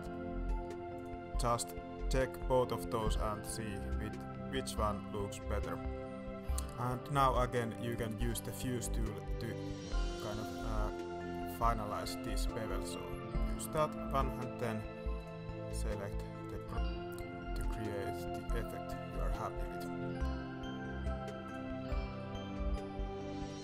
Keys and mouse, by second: 0.9 click, 2.3-4.8 drag, 6.2 alt+a, 6.5 click, 7.9 alt+click, 8.5 middle click, 10.1-13.3 drag, 15.1 click, 16.5-17.9 drag, 18.5-18.9 drag, 19.5 Tab, 19.8-21.5 middle drag, 22.1-23.4 middle drag.